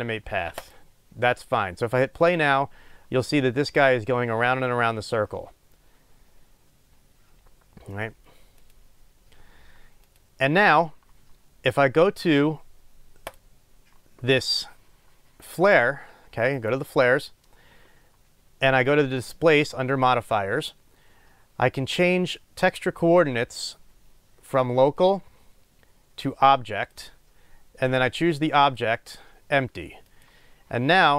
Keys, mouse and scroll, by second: 8.6-13.3 drag, 27.0-31.1 drag.